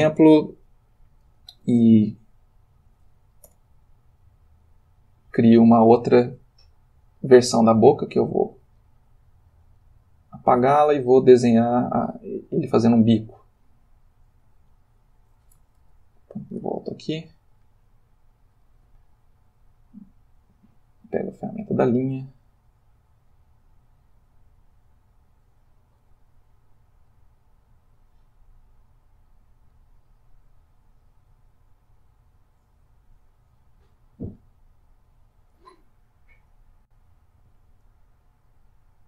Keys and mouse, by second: 3.5 ., 3.7 i, 4.4 click, 8.2 x, 8.8 click, 14.3-15.6 drag, 15.8 ctrl+z, 18.4 click, 19.7 click, 20.3 click, 23.1-34.6 drag.